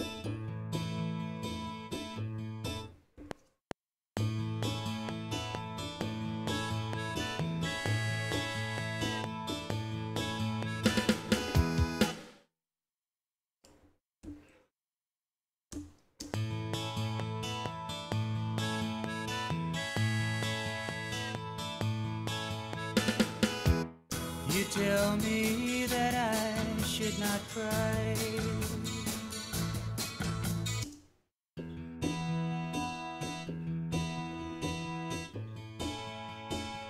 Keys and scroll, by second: 3.1 F7, 12.0 space, 14.2 q, 15.7 Return, 16.2 space, 23.7 space, 30.9 space.